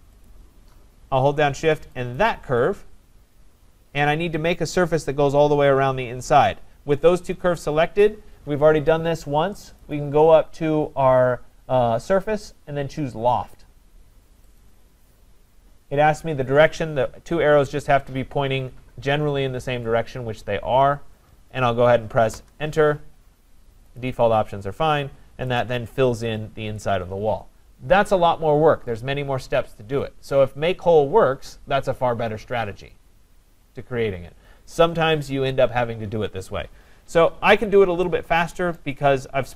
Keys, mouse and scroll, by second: 0.3 click, 2.2 shift+click, 2.9 scroll up 3, 7.8 scroll, 9.8 click, 14.6 click, 22.3 Return, 24.0 click, 25.6 click, 37.7 click, 38.8 right click.